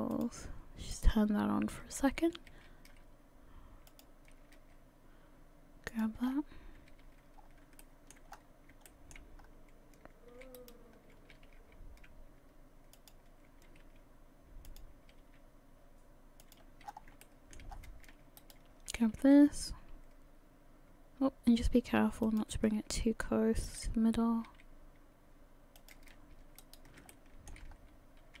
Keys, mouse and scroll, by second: 0.1 alt+middle click, 1.6 click, 1.7 click, 2.5 s, 4.6 g, 6.2-6.8 scroll down 3, 6.8 scroll down 3, 6.8 a, 7.0 a, 7.4 scroll down 2, 7.8 shift+middle click, 8.4 scroll up 5, 8.9 shift+middle click, 9.4 scroll up 2, 10.8 alt+right click, 11.3 h, 13.8 r, 15.2 g, 16.8 scroll down 6, 17.2 shift+middle click, 17.7-18.2 scroll up 6, 18.4 alt+right click, 19.2 s, 22.9 g, 24.1 s, 26.6 alt+right click, 27.1 shift+middle click, 27.7-28.4 scroll.